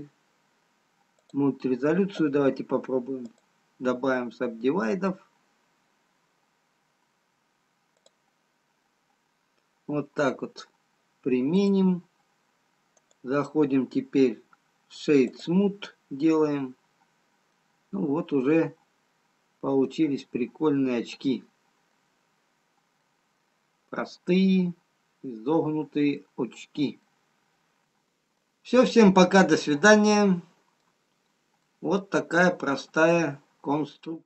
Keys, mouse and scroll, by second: 3.8 click, 11.8 click, 13.4 right click, 16.2-16.8 scroll up 1, 16.8 scroll up 4, 17.8 middle click, 17.8 scroll up 2, 18.8-19.4 scroll down 4, 19.4-19.8 scroll down 5, 21.6 middle click, 21.6-22.0 scroll down 1, 23.2 middle click, 23.2-24.6 scroll down 1.